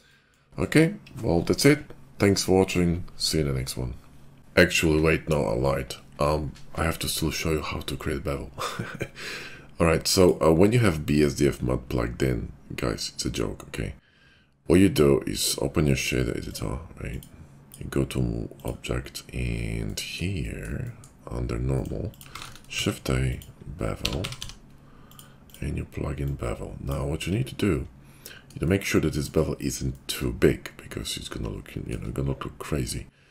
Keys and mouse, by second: 10.2 click, 11.2 click, 14.8-16.2 drag, 16.2 middle click, 16.6-22.2 drag, 22.2 shift+middle click, 22.7 shift+a, 26.1-27.4 drag, 27.4-29.2 middle drag, 29.2-33.3 shift+drag.